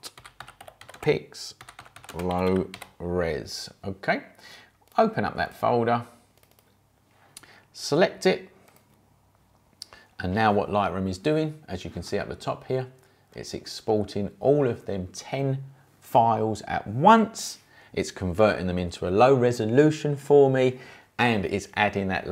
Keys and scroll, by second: 0.0-3.2 typing.